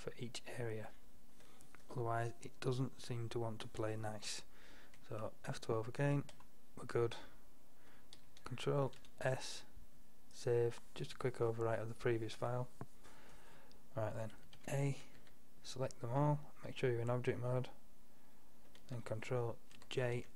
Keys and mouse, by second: 0.7 middle drag, 1.2 middle click, 2.4-5.4 middle drag, 6.4 F12, 6.4 F11, 9.0 ctrl+s, 13.2 middle drag, 14.6 a, 15.2 a, 19.8 ctrl+j.